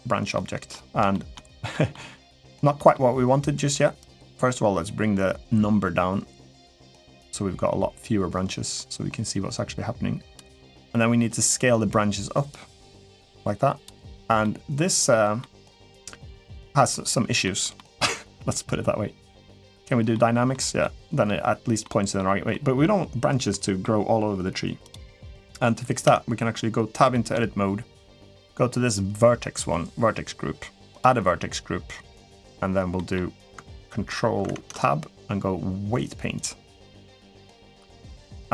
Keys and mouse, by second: 0.1-0.5 middle drag, 0.9 shift+middle drag, 1.5 middle click, 2.5 middle click, 3.9-10.2 drag, 12.4-13.6 drag, 14.2-14.9 middle drag, 15.2-16.1 middle drag, 17.2 middle click, 19.3 click, 19.9-20.3 middle drag, 20.6-21.1 middle drag, 21.7 middle drag, 22.3-22.6 middle drag, 23.4 middle drag, 25.8 Tab, 26.9 shift+middle click, 28.2 click, 32.7 middle click, 34.3 ctrl+Tab, 37.1 middle click.